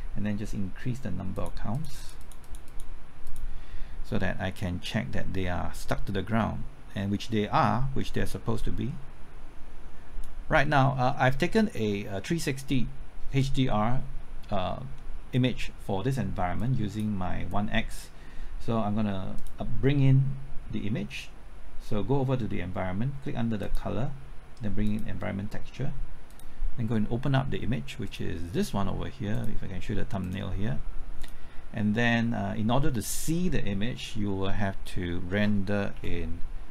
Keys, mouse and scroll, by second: 17.0 click, 35.9 z.